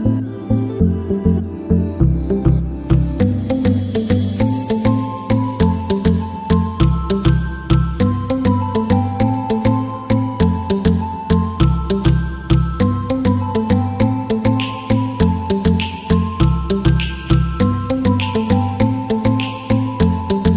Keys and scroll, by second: 0.0-6.0 typing, 9.6 ctrl+s.